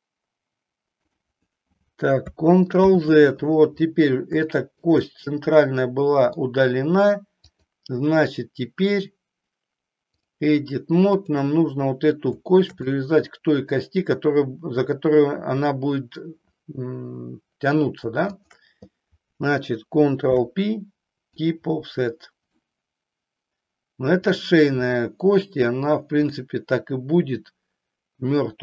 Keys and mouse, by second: 2.7 ctrl+z, 4.5 shift+middle click, 6.0 middle click, 7.5-10.3 drag, 11.1 click, 13.0 middle click, 18.2 shift+click, 20.2 ctrl+p, 22.6-24.5 middle drag, 26.2-28.6 middle drag.